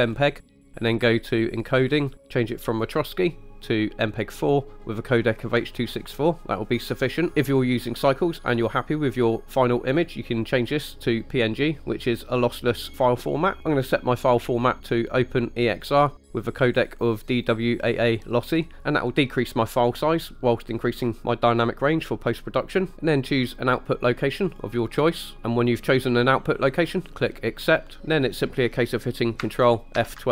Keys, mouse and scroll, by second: 0.2-1.6 scroll down 2, 1.6 drag, 2.0-2.9 scroll down 3, 2.9-4.4 drag, 7.3 click, 10.0-11.4 drag, 13.6 click, 14.6-15.9 drag, 16.8-18.5 drag, 24.6-25.0 drag, 28.0 scroll up 2.